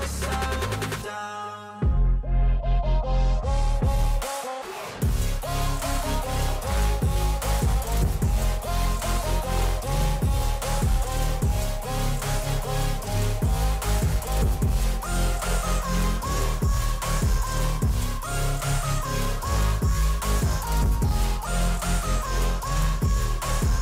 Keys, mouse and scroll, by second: 3.6 shift+click, 5.0 ctrl+g.